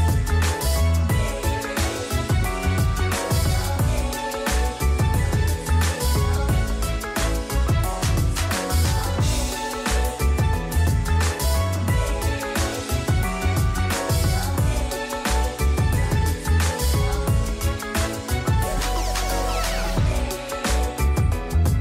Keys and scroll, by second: 0.0-0.2 typing, 2.7-3.1 typing, 14.8 0, 14.9 Tab, 18.6-20.3 typing.